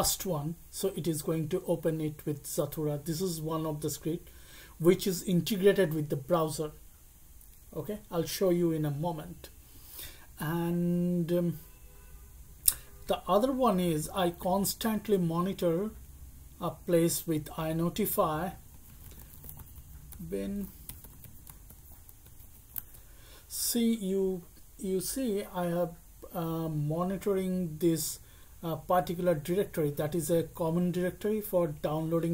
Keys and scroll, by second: 18.5-23.0 typing.